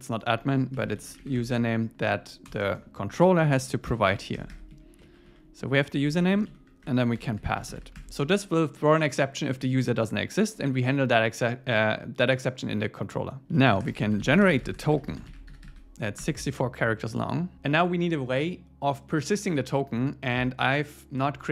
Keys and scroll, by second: 4.4 Delete, 4.7 Down, 5.1 super+Right, 5.3 Left, 5.9 Right, 6.2 alt+shift+Left, 7.9 Escape, 9.8 super+Right, 13.4 Return, 16.2 Return.